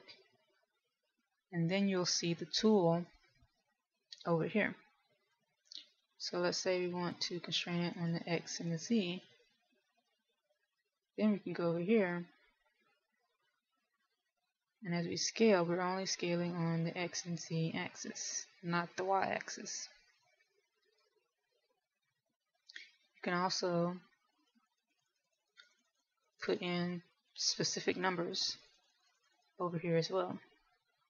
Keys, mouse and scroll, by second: 4.2 click, 9.0 click, 9.8 click, 12.0 s, 22.0 right click, 25.5 click, 25.7 click, 26.2-26.7 click, 26.5 click, 27.1 click, 27.5 click, 27.7-28.9 click, 28.5 click, 29.2-29.9 click, 29.6 click, 30.2 click, 30.4 click, 30.6 click.